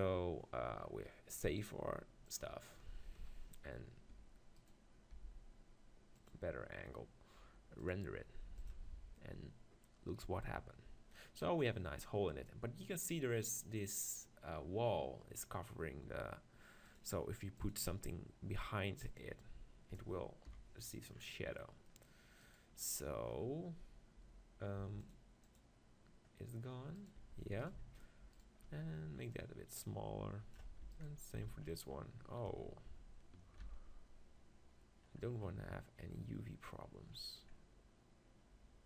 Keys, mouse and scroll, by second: 3.4 KP_0, 4.7-6.1 right drag, 5.1 g, 7.6-9.7 drag, 17.7-19.6 drag, 20.5 KP_7, 21.2 middle click, 22.4 right click, 27.0 right click, 27.2 Tab, 30.8 Tab, 31.3 Tab, 33.6 ctrl+r.